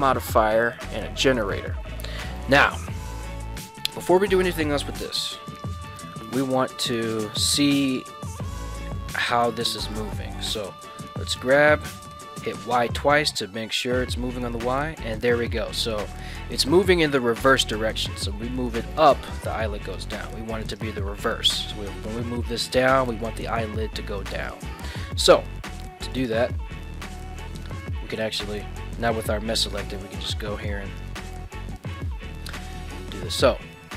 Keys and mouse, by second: 5.5 right click, 7.9 right click, 8.4 ctrl+Tab, 8.7 click, 9.8 click, 10.8 g, 12.0 y, 12.1 y, 20.7 right click, 22.3 g, 23.0 z, 24.4 right click, 25.4 ctrl+Tab, 26.1 right click.